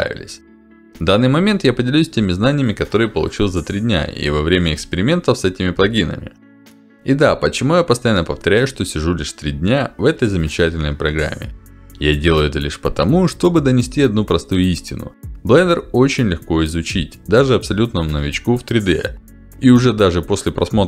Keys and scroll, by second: 3.5 ctrl+z, 4.1 ctrl+z.